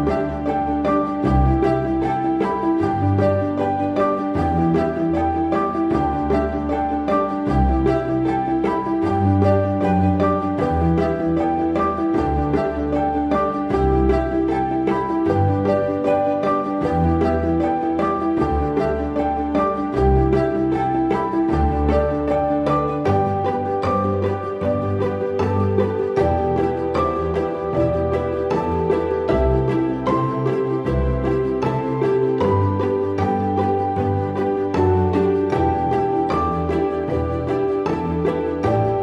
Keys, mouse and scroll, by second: 0.2-1.0 typing, 6.4 double click, 12.7 right click, 25.1 right click, 26.3 double click.